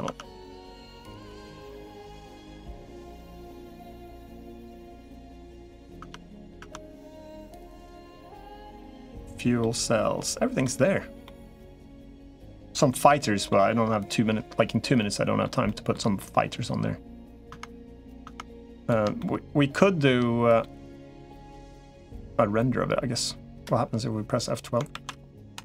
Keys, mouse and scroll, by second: 0.4 middle click, 2.0-3.2 middle drag, 5.1 middle click, 5.9 Tab, 6.5 Tab, 7.7-8.8 middle drag, 9.4-10.4 middle drag, 11.1 middle click, 12.7 middle click, 14.8 middle click, 15.5 shift+middle click, 16.0-17.2 middle drag, 17.3 Tab, 18.1 Tab, 19.1 shift+middle click, 20.4 middle click, 24.7 ctrl+s.